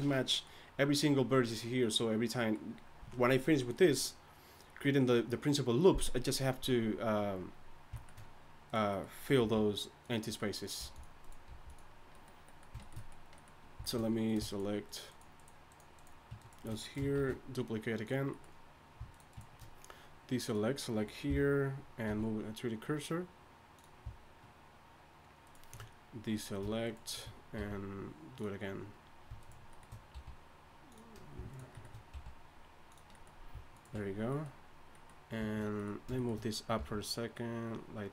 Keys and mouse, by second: 9.4 g, 10.8 g, 11.5 g, 17.2 shift+d, 21.3 ., 22.1 r, 25.4 click, 27.6 r, 30.1 r, 32.1 r, 36.8 g.